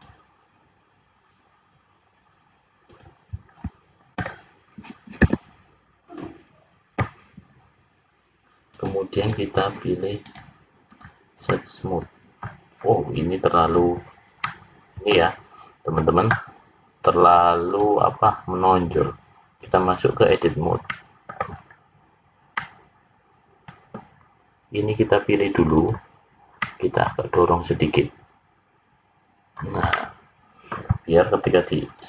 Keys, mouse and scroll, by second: 3.4-4.1 scroll down 4, 8.6 click, 10.2 right click, 11.4 middle click, 13.6 click, 14.4 middle click, 17.2 click, 19.5 click, 20.8 middle click, 21.5-21.9 scroll up 4, 22.5 middle click, 25.5 click, 25.9 click, 26.6 middle click, 27.8 click, 29.9 middle click, 31.9 click.